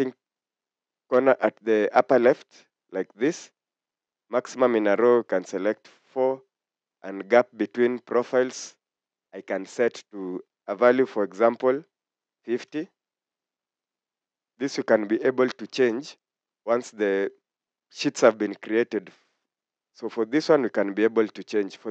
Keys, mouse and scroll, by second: 12.3-12.7 typing, 15.6 typing.